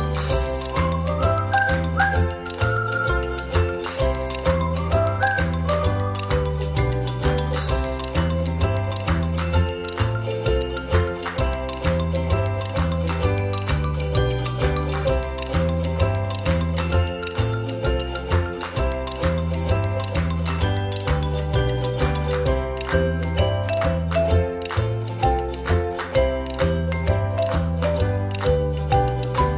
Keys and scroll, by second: 9.3 a, 11.2 ctrl+z, 11.8-12.3 ctrl+-, 16.0 space, 17.3 space, 18.4 space, 19.2 space, 20.5 space.